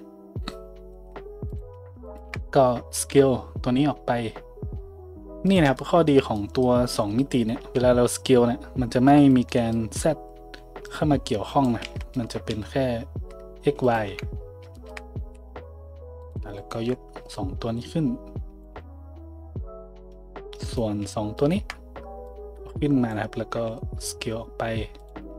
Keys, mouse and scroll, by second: 1.5 click, 1.5-2.1 shift+middle drag, 2.1 shift+click, 2.1-10.8 shift+middle drag, 2.9 s, 7.6 s, 10.8-25.1 drag, 11.8 ctrl+z, 12.5 s, 14.1 `, 15.2 a, 16.2 middle click, 16.2 right click, 16.6 shift+middle click, 16.6 shift+right click, 18.8 a, 20.6 right click, 21.4 shift+right click, 23.5 s, 25.1-25.3 middle drag, 25.2 a.